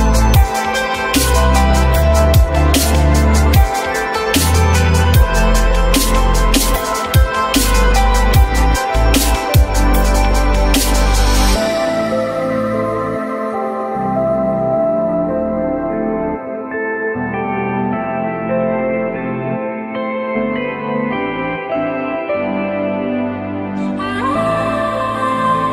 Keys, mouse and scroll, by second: 3.8 alt+middle click, 4.4 alt+middle click, 10.9 alt+middle click, 11.4 alt+middle click, 16.7-17.7 typing, 21.3 alt+middle click.